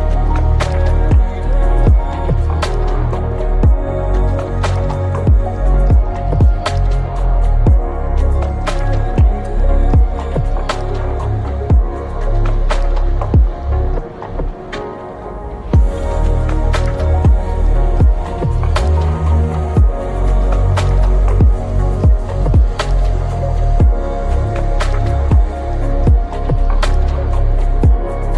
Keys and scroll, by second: 1.2 ctrl+z, 2.8-5.7 typing, 5.3 Return, 7.1 Return, 7.2-11.3 typing, 10.7 Tab, 11.6 ctrl+s, 27.8 p.